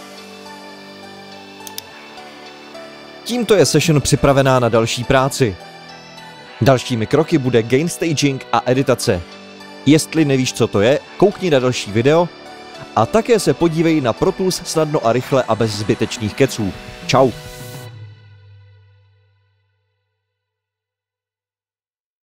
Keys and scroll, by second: 5.1 super+9, 15.9 super+s.